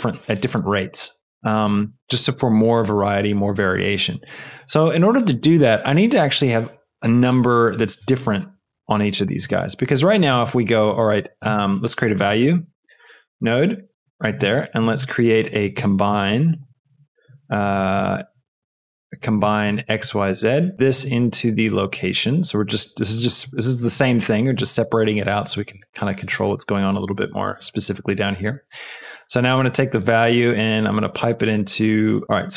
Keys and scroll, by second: 11.2-12.8 typing, 13.4 Return, 14.6 shift+a, 15.7 c, 16.1 o, 16.3 m, 16.5 b, 17.8 Down, 18.5 Up, 19.6 Up, 20.3 Return.